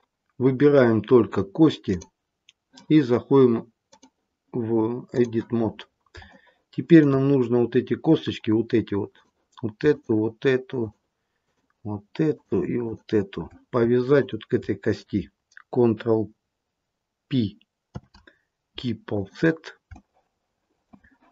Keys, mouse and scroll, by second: 1.8 click, 3.9 click, 5.7-6.3 scroll up 5, 6.3 shift+middle click, 7.3-7.9 scroll up 1, 9.0 click, 9.8 shift+click, 10.7 click, 12.0 shift+click, 12.2 shift+click, 12.8 shift+click, 17.9 ctrl+p, 19.8 shift+middle click.